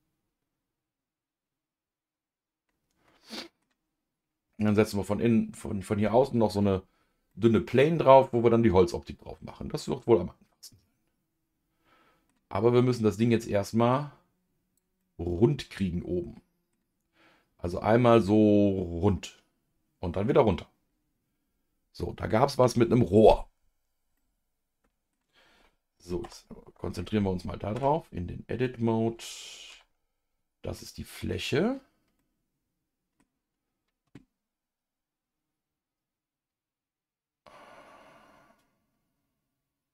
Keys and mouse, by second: 7.3-12.3 middle drag, 12.7 middle click, 14.7 click, 15.0-16.7 middle drag, 24.2 middle click, 26.2 KP_Divide, 27.7 Tab, 29.7 KP_Decimal, 30.8 middle click, 32.2-33.2 middle drag.